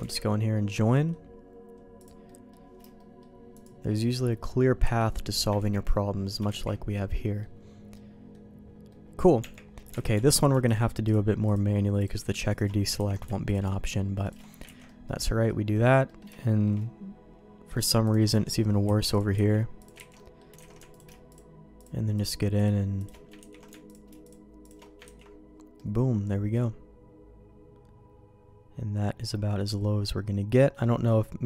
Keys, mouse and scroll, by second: 0.0 ctrl+z, 0.8 middle click, 1.9 click, 2.3 middle click, 2.9 shift+middle click, 3.5 shift+click, 4.8 j, 5.5 ctrl+z, 6.4 ctrl+shift+z, 7.1 middle click, 7.9 middle click, 8.9 middle click, 9.4 Tab, 10.0 alt+a, 10.2 alt+click, 11.0-12.5 alt+shift+drag, 12.9 ctrl+x, 13.4 alt+click, 14.8 middle click, 15.4 middle click, 16.0 middle click, 16.3 middle click, 18.8 ctrl+x, 19.5 ctrl+x, 19.8 click, 20.1 ctrl+x, 20.1 middle click, 20.5 Tab, 20.5 j, 20.6 alt+a, 22.5 alt+shift+click, 23.5 ctrl+x, 24.2 alt+shift+click, 25.2 ctrl+x, 25.7-31.4 middle drag.